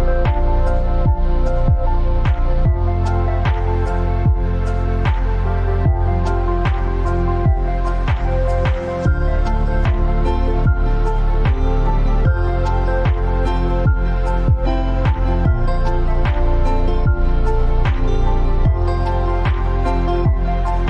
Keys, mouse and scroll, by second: 0.0 click, 5.1 alt+scroll up 1, 5.6 scroll down 1, 6.2 alt+scroll up 1, 6.9 alt+scroll up 1, 9.4 t, 9.8 click, 11.9 ctrl+a, 13.3 click, 14.1-14.5 typing, 16.4 click, 19.2 click, 20.0-20.8 scroll up 1.